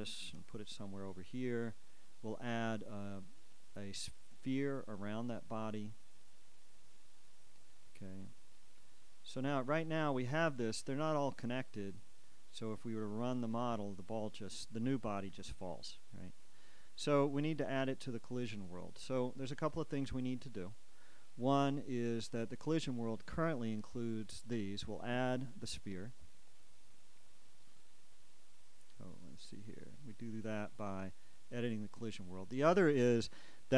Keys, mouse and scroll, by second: 0.8 g, 20.3 Escape, 30.8-33.7 shift+right drag.